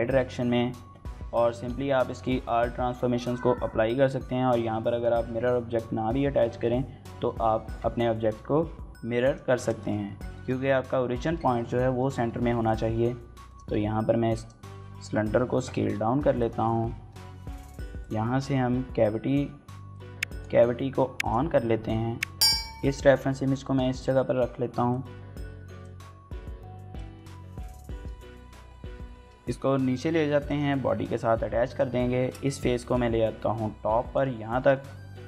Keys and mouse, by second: 1.2 ctrl+a, 4.7 click, 7.4 Tab, 8.1 s, 9.0 click, 9.4 shift+middle click, 9.6 middle click, 10.1 shift+middle click, 11.3 shift+middle click, 11.6 middle click, 13.3 click, 13.5 s, 14.1 click, 14.9 KP_7, 15.6 g, 16.2 click, 16.9 shift+middle click, 17.8-22.4 drag, 23.4 middle click, 23.5 middle click, 23.7 middle click, 23.8-28.6 typing, 24.0 middle click, 24.5 middle click, 24.7 click, 24.7 shift+middle click, 25.0 click, 25.2 middle click, 26.1 click, 26.7 shift+click, 27.1 shift+click, 27.5 click, 27.6 shift+middle click, 28.1 middle click, 28.4 click, 28.9 shift+middle click, 29.1 middle click, 30.2 click, 30.4 middle click, 31.2 3, 32.0 shift+middle click, 32.2 middle click, 32.5 g, 32.7 z, 33.8 click, 34.3 shift+middle click, 34.5 middle click.